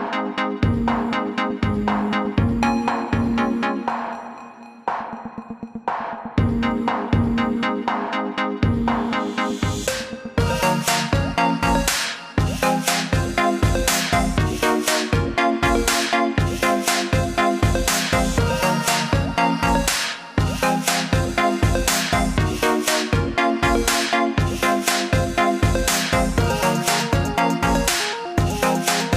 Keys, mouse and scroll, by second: 2.2 click, 7.3 click, 8.4-9.0 alt+scroll up 2, 10.1 click, 13.7 click, 15.2 click, 16.7-17.3 scroll down 2, 19.2 click, 21.4 click, 25.2-25.8 scroll up 2, 26.0 alt+scroll down 1, 26.2 scroll up 1, 26.7-27.1 scroll up 1.